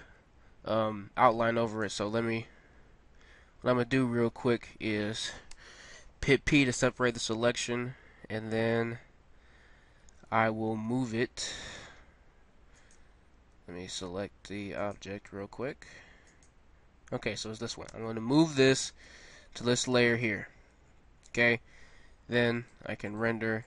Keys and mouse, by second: 3.5 Tab, 5.5 p, 9.0 Tab, 10.8 m, 13.5-14.6 drag, 15.5-18.0 drag, 18.0 m, 22.5 middle click.